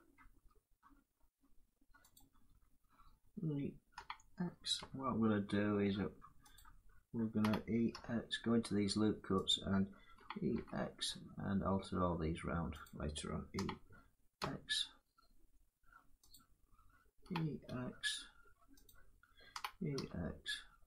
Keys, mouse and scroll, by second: 1.8-7.0 drag, 3.6 e, 6.2-7.1 typing, 9.2 click, 9.9 e, 12.5 click, 14.0 e, 16.0 click, 16.9 e, 18.5 click, 19.3 e.